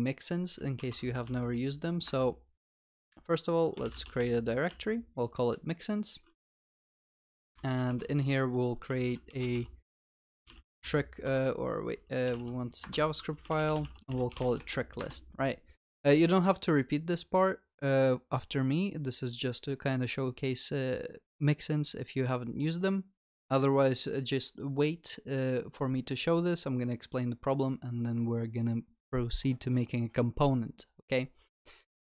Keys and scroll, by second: 0.8 alt+Insert, 6.7 shift+F6, 11.8 alt+Insert.